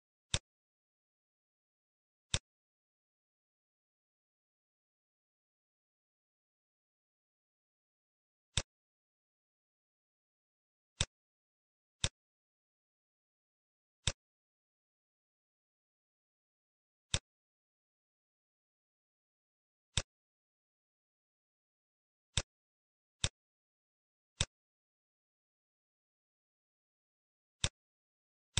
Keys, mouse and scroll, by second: 0.3 click, 2.3 shift+click, 7.8 middle click, 8.4 click, 9.7 shift+d, 11.9 click, 17.0 click, 21.2 middle click, 22.3 shift+click, 23.8 shift+a.